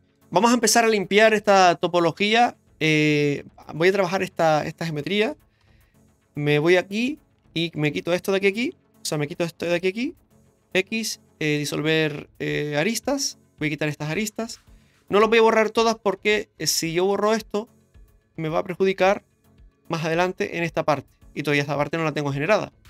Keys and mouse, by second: 0.0 middle click, 2.6 middle click, 5.6 k, 7.5 right click, 8.1 shift+right click, 9.0 right click, 9.6 shift+right click, 10.3 right click, 10.7 x, 13.2 right click, 13.8 shift+right click, 14.5 x, 15.8 middle click, 17.1 alt+shift+right click, 17.7-19.1 middle drag, 19.7 middle click.